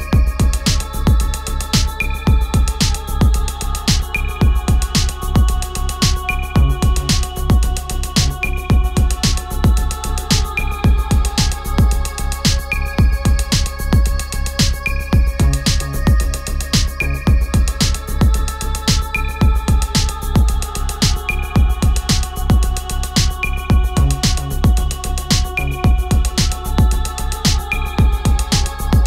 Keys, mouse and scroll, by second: 8.2-15.5 drag, 17.8-24.6 drag, 25.3 right click, 26.4-29.0 drag.